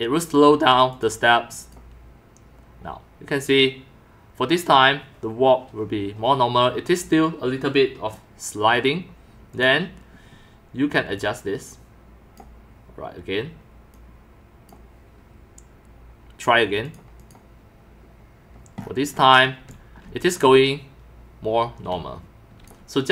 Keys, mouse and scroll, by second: 0.9 click, 1.6 click, 8.2 middle drag, 9.5 click, 11.1-12.4 drag, 13.9 click, 16.9 click, 17.2 click, 19.1 right drag, 19.7 x, 19.7-20.4 drag, 20.1 c, 21.9-22.5 x, 21.9-22.7 drag.